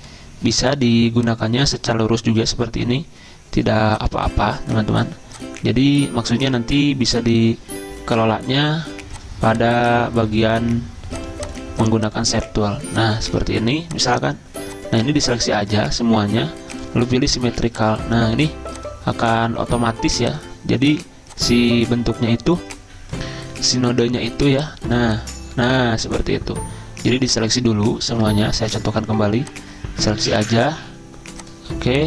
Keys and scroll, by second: 28.3 ctrl+z, 28.7 ctrl+z.